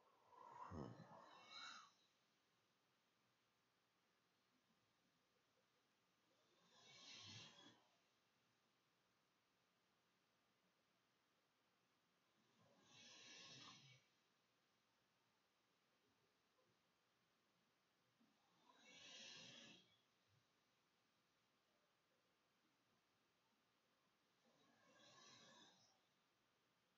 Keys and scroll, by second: 4.5-7.8 typing, 9.4-15.7 typing, 15.7 Down, 16.5 Right, 18.6 shift+Return, 19.7-23.2 typing, 26.1 ctrl+shift+z, 26.3 ctrl+shift+s.